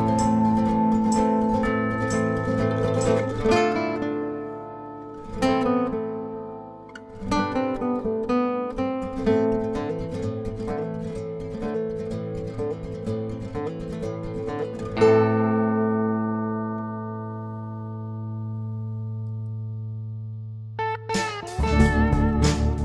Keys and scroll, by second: 3.2 ctrl+d, 4.0 ctrl+*, 17.8 Page_Down.